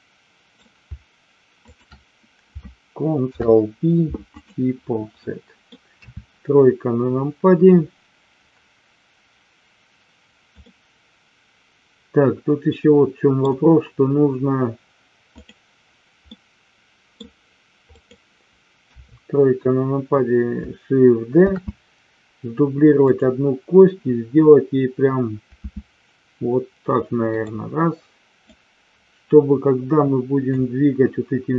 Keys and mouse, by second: 1.6 shift+click, 3.1 ctrl+p, 5.1 middle click, 6.0 KP_3, 10.6-13.3 middle drag, 15.3 click, 16.3 middle click, 17.9 click, 18.9 KP_3, 21.3 shift+d, 23.0 click, 25.5 s, 27.3 click, 28.6-30.5 drag.